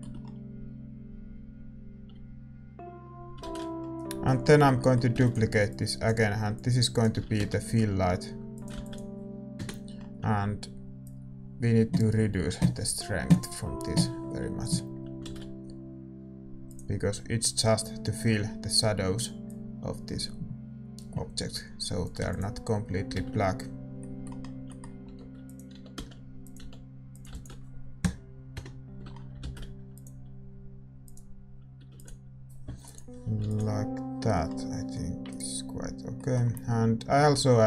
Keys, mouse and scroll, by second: 3.5-6.5 middle drag, 3.5 shift+z, 5.2 shift+d, 6.5-8.5 drag, 7.1 r, 9.5 ctrl+s, 9.5 KP_0, 16.6 shift+z, 18.4-25.0 drag, 18.4-22.2 middle drag, 22.2 ctrl+s, 23.2 shift+z, 25.0-26.6 middle drag, 25.0 g, 25.7 r, 26.6 g, 28.5 ctrl+s, 28.5-30.9 drag, 28.5 KP_0, 30.9 middle click, 30.9 shift+z, 31.1-36.6 drag, 31.9 ctrl+s, 34.3 ctrl+s, 34.3-37.6 middle drag, 36.6-37.6 right drag.